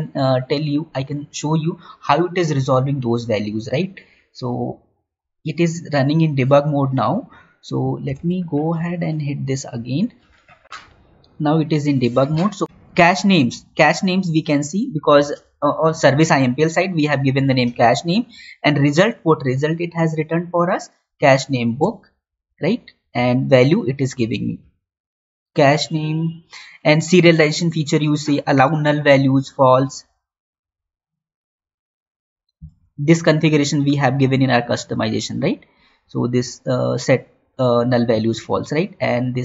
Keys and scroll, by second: 8.5 alt+Tab, 10.6 alt+Tab, 21.8 Right, 22.2 Down, 22.9 Up.